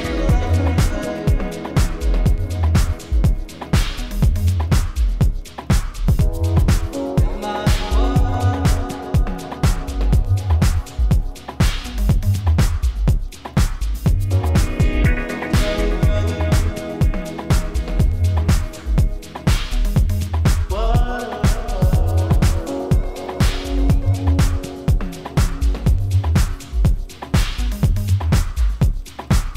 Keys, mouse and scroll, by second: 4.5-6.2 drag, 10.1 v, 10.2 click, 11.1 space, 11.2 click, 11.4-12.0 space, 12.7 space, 17.2 click, 20.2 click, 23.3 click, 23.6-26.5 scroll up 1.